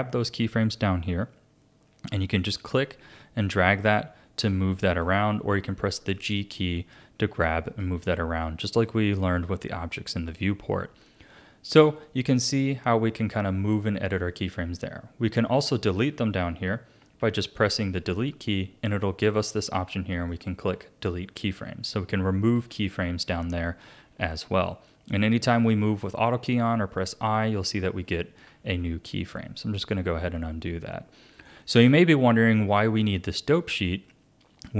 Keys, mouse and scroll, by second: 2.5-5.5 drag, 5.5 g, 10.0-13.1 drag, 17.2 Delete, 22.7 ctrl+z, 24.0 a, 24.7-26.6 drag, 28.5 ctrl+z, 30.3-33.4 shift+middle drag.